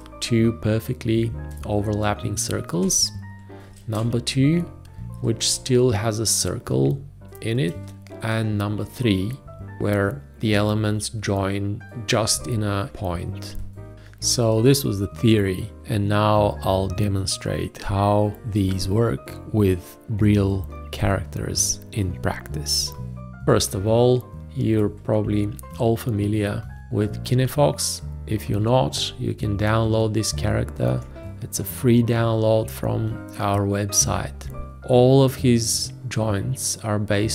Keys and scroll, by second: 2.8 ctrl+space, 4.9 ctrl+space, 14.1 space, 23.2 g.